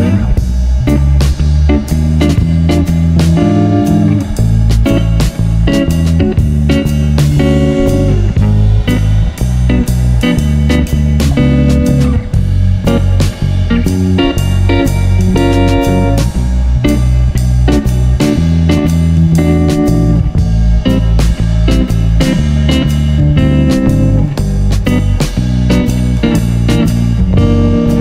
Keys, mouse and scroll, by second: 1.2 click, 1.4 click, 1.4 middle click, 1.6 g, 2.0 click, 2.9 g, 5.0 click, 5.2 click, 5.4 g, 5.7-6.9 drag, 8.7 click, 9.1 g, 9.4 click, 10.1-10.7 drag, 10.4 g, 11.4 g, 11.8 click, 12.4-13.9 drag, 13.9 g, 15.8 g, 17.2-18.4 drag, 18.7 g, 21.2 g, 22.0 n, 22.9 g, 23.8 click, 24.1 g, 25.8 KP_1, 26.2 shift+a.